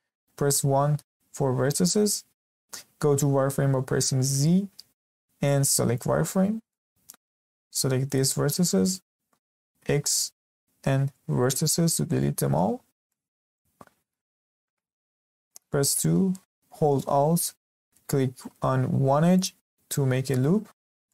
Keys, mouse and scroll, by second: 0.5 1, 4.3 z, 6.4-6.7 scroll up 1, 6.7 shift+middle click, 7.2 click, 9.7 x, 12.0-12.7 scroll up 1, 12.7-13.0 scroll down 1, 13.0-15.7 shift+middle drag, 15.7 2, 19.3 alt+click, 20.8 scroll down 1, 21.0-21.1 middle drag.